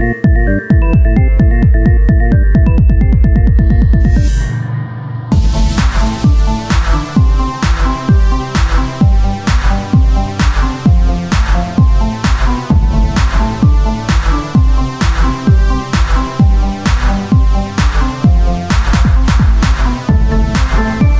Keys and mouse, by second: 0.1 s, 1.8 click, 3.6 Tab, 9.1 c, 10.0-11.6 drag, 13.0 Tab, 15.2 Tab, 16.8 s, 18.3-20.0 drag, 20.0 Tab.